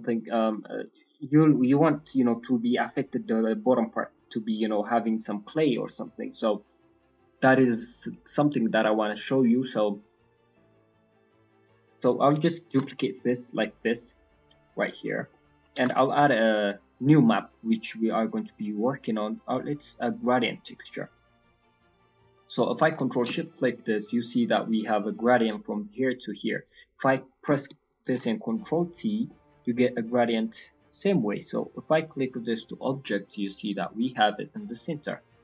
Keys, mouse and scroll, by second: 10.0-10.9 scroll down 8, 10.6 middle click, 10.9-11.2 scroll up 1, 11.2 scroll down 1, 11.3 scroll down 1, 11.4 middle click, 11.9 click, 12.7 shift+d, 14.1 click, 14.6 scroll up 3, 14.8 middle click, 15.2 middle click, 15.5 scroll up 1, 15.7 shift+a, 21.5 middle click, 21.8-22.1 scroll down 2, 22.1 middle click, 22.5 middle click, 23.2 ctrl+shift+click, 23.5 middle click, 23.7-24.5 scroll up 4, 24.5 middle click, 25.0 middle click, 26.5 middle click, 26.9 click, 27.1 click, 28.1 ctrl+t, 28.6 middle click, 28.7 scroll up 3, 29.2 middle click, 32.0 click, 32.8 middle click, 34.6 middle click, 34.8 scroll up 2.